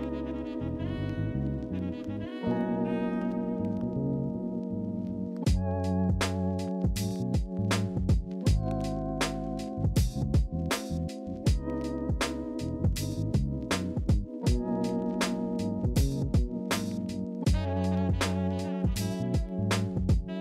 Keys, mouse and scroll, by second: 4.2 ctrl+c, 4.4 ctrl+f, 14.3 ctrl+c, 14.5 ctrl+f.